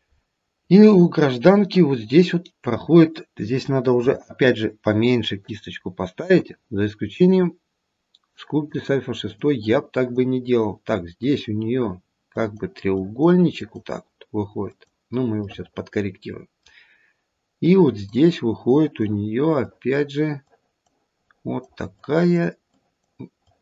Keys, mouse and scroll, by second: 0.2-1.3 scroll down 1, 3.9 f, 6.4 click, 8.3 click, 9.2 click, 9.9 click, 11.2 click, 12.3 click, 12.9 click, 13.5 click, 14.7 click, 15.5 middle click, 17.6 click, 18.6 click, 19.6 click, 20.5 click, 21.2 click, 21.9 click, 22.6 click, 23.4 click.